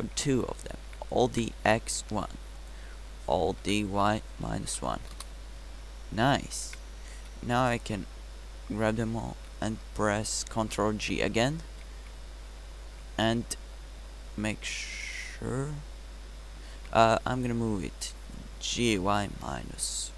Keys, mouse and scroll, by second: 2.0 alt+d, 4.5 alt+d, 6.6 a, 7.3 b, 12.4 ctrl+j, 16.0 Tab, 17.7 Tab, 18.9 g.